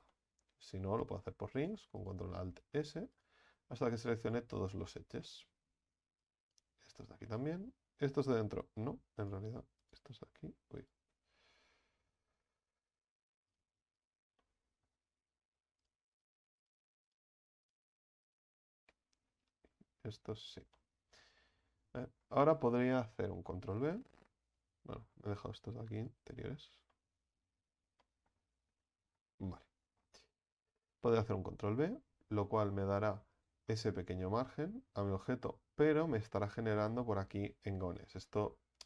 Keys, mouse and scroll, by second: 0.1-1.6 middle drag, 1.6 ctrl+alt+shift+right click, 2.0 ctrl+alt+shift+right click, 2.8 ctrl+alt+shift+right click, 3.2 ctrl+alt+shift+right click, 3.9 ctrl+alt+shift+right click, 4.2 ctrl+alt+shift+right click, 4.8-6.2 middle drag, 6.2 ctrl+alt+shift+right click, 6.4 ctrl+alt+shift+right click, 7.2-8.3 middle drag, 8.3 ctrl+alt+shift+right click, 8.3 ctrl+alt+shift+right click, 9.2 ctrl+alt+shift+right click, 9.8 ctrl+shift+right click, 10.8 ctrl+alt+shift+right click, 11.4 ctrl+z, 11.6 ctrl+z, 12.5 shift+right click, 12.9 shift+right click, 13.5 shift+right click, 14.0 shift+right click, 14.4-15.3 middle drag, 15.3-15.8 scroll up 4, 15.8 shift+right click, 16.1 shift+right click, 16.6 shift+right click, 17.1 shift+right click, 17.7 shift+right click, 18.3-19.6 shift+right drag, 20.1-20.7 scroll down 4, 20.7-21.6 middle drag, 21.6-22.0 scroll up 3, 22.0-23.5 middle drag, 23.5 ctrl+b, 25.1-26.0 scroll up 4, 26.0 ctrl+alt+shift+right click, 26.3-26.9 scroll down 7, 26.9 middle click, 27.8 scroll up 2, 28.0 middle click, 28.6-29.0 scroll up 2, 29.0-29.4 scroll down 6, 29.4 middle click, 30.3-30.9 scroll up 2, 30.9-31.3 scroll up 1, 31.3 ctrl+b, 33.8-34.8 shift+middle drag, 34.8-35.4 scroll up 2, 35.4-36.2 scroll up 8, 38.0-38.8 scroll down 6.